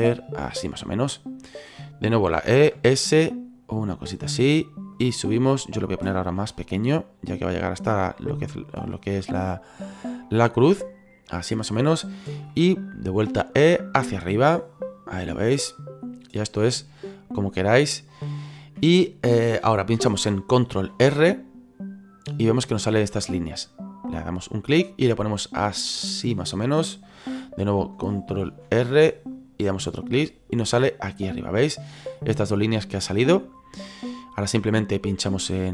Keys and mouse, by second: 0.9 shift+middle click, 2.4 e, 2.7 s, 4.2 click, 6.4 s, 9.0 click, 9.4 middle click, 10.2 shift+middle click, 12.5 middle click, 13.3 e, 15.2 click, 17.0 click, 18.3 shift+middle click, 20.9 ctrl+r, 24.1 click, 26.3 click, 28.5 ctrl+r, 29.3 click, 30.6 middle click, 32.6 middle click, 35.3 right click.